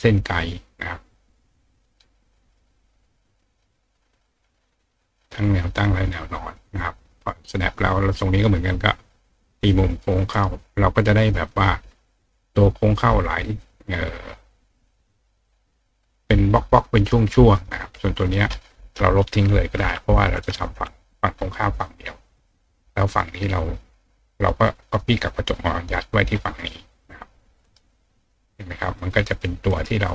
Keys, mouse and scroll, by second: 3.0-4.8 drag, 7.6 click, 8.8 click, 10.0 click, 10.3 right click, 11.3 click, 14.5 click, 15.1 click, 16.1 click, 17.0 click, 17.5 click, 17.9 click, 20.5 click, 26.9 click, 27.6 right click, 29.0 click, 29.7 right click.